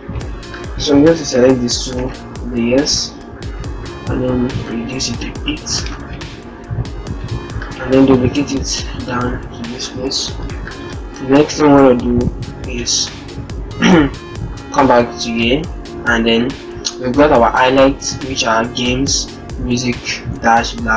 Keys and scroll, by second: 2.9 ctrl+t, 13.2 alt+Tab, 20.3 ctrl+c.